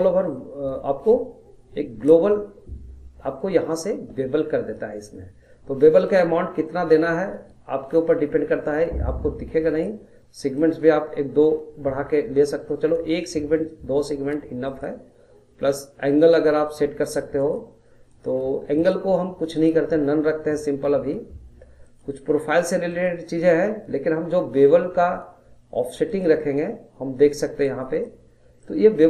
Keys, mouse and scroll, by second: 6.1-9.1 drag, 10.6-13.7 drag, 14.6-18.2 drag, 18.8-26.0 drag, 28.6-29.0 middle drag.